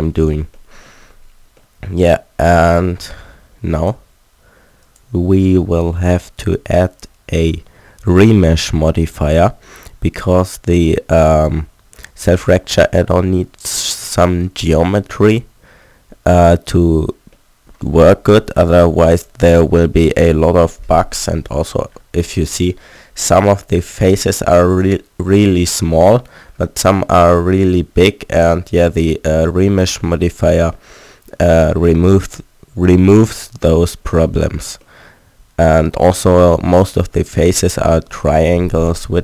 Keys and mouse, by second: 0.0 n, 3.4 middle click, 3.8-6.0 drag, 12.7 middle click, 15.1-16.7 middle drag, 20.9 Tab, 22.0 middle click, 24.7-30.1 drag, 30.4 middle click, 37.6-39.2 middle drag.